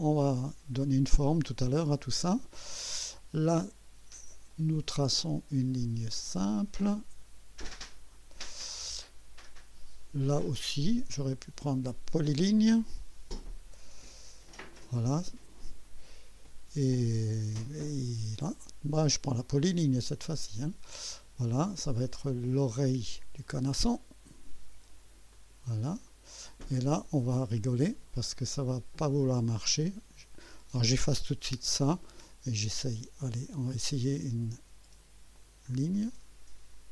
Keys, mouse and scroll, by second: 4.5 click, 6.2 click, 7.9 click, 10.4 click, 11.9 click, 14.6 click, 19.3 click, 20.5 click, 23.4 click, 25.3 click, 26.0 right click, 26.7 right click, 30.4 click, 31.6 Delete, 33.6 click, 35.3 click.